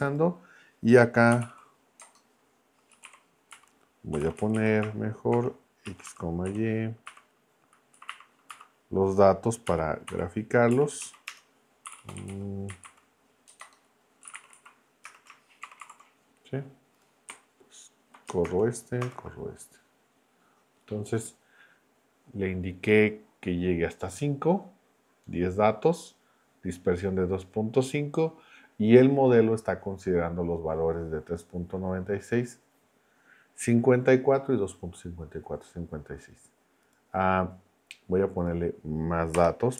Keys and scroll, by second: 1.1-7.9 typing, 8.5 Left, 9.7 ., 10.1 k, 10.7 Right, 11.3 Return, 11.6-14.5 typing, 15.0 Return, 15.6 shift+9, 18.4 shift+Return, 39.3 BackSpace.